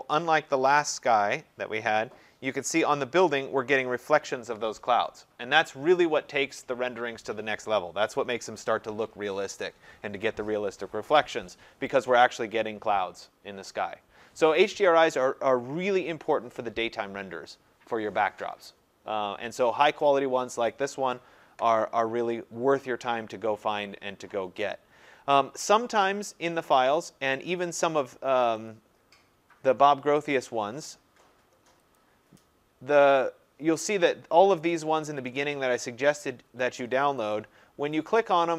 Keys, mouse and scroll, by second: 0.8 click, 1.5 scroll, 28.7 click, 30.3 click, 32.0 click, 37.3 click.